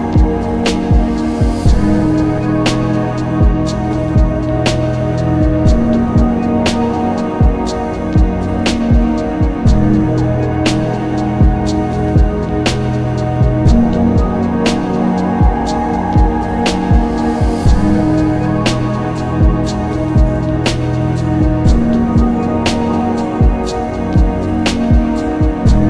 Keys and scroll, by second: 1.4 ctrl+alt+z, 1.6 ctrl+alt+s, 5.7 ctrl+alt+z, 7.2 ctrl+z, 8.7 ctrl+z, 10.7 alt+z, 11.2 alt+z, 11.4 alt+s, 11.9 z, 21.7 x.